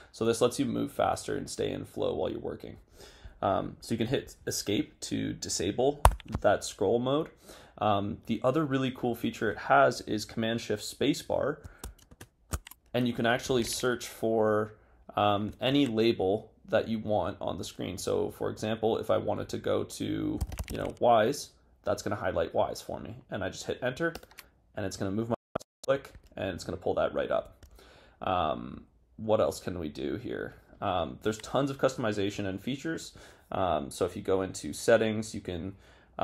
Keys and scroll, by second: 12.2 shift+super+space, 15.6 super+BackSpace, 20.3-21.2 typing, 23.7 typing.